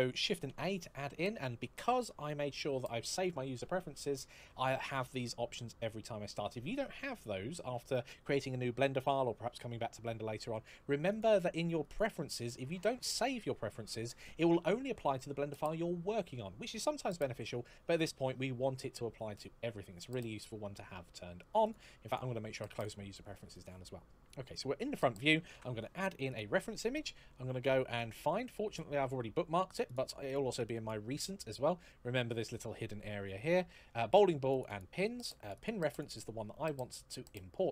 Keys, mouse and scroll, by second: 0.2 shift+a, 10.9 click, 19.1 click, 21.4 click, 25.3 shift+a, 26.0 click, 26.1 click, 29.6 click, 32.1 click, 34.3 click.